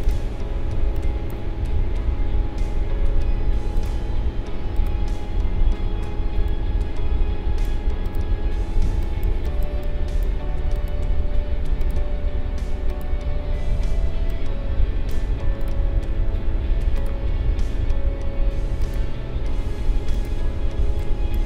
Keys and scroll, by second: 8.8 space, 20.8 space.